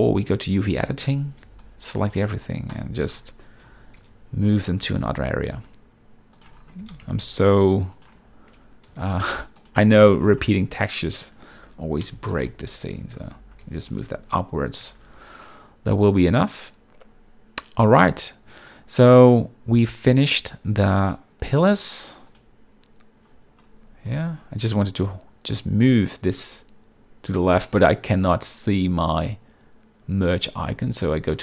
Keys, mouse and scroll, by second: 0.0 click, 0.7 Tab, 1.2 z, 1.6 b, 1.7 click, 4.1 g, 5.0 g, 6.5 shift+click, 6.9 g, 8.1 shift+click, 8.7 Tab, 9.0 z, 9.7 click, 10.0 Tab, 11.3 click, 12.5 ctrl+l, 13.7 g, 14.1 y, 14.8 click, 15.0 Tab, 22.4 click, 24.2 z.